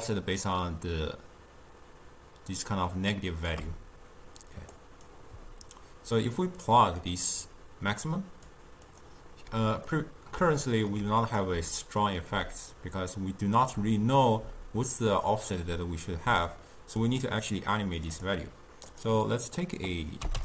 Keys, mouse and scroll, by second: 4.9-10.0 drag, 10.0-15.1 middle drag, 17.1-19.1 drag, 19.6-20.4 drag.